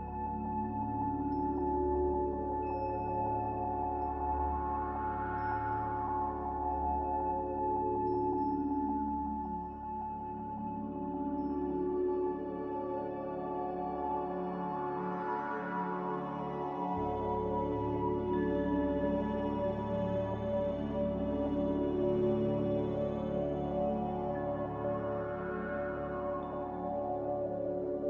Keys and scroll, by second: 0.1-0.7 typing, 4.4 ctrl+z.